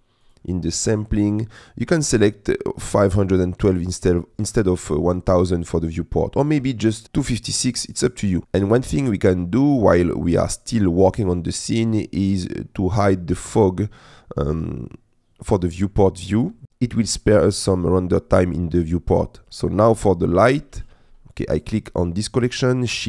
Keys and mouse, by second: 0.3 click, 13.5 click, 20.4 click.